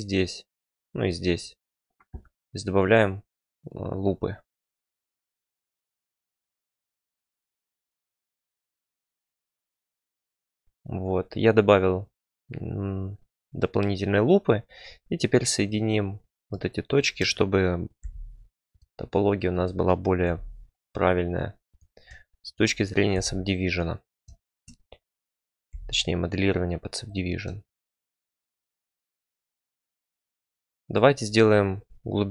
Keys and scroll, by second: 5.2 k, 5.4 c, 5.8 Return, 6.9 k, 7.1 c, 7.2 z, 9.1 Return, 17.9 j, 20.2 j, 23.1 j, 25.6 j, 27.8 j.